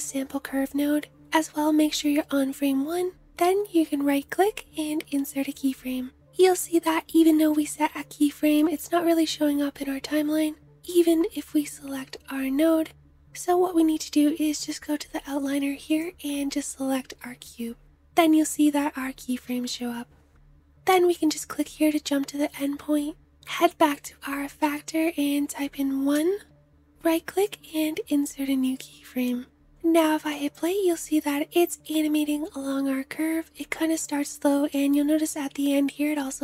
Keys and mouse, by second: 10.8-20.8 drag, 20.8-29.2 middle drag, 29.2 space, 30.2-36.4 drag.